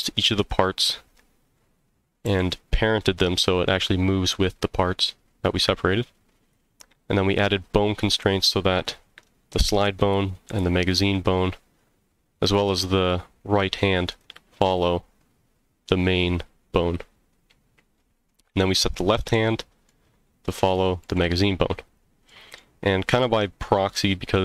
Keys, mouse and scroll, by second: 0.4 click, 2.2 g, 6.3 right click, 14.1 click, 14.6 g, 16.8 right click, 17.5-18.1 scroll down 3, 18.3-18.6 middle drag, 19.3-19.9 middle drag, 20.6 click, 21.0 g, 21.8 right click, 22.3 middle drag, 22.7 scroll down 1, 23.1-23.6 middle drag.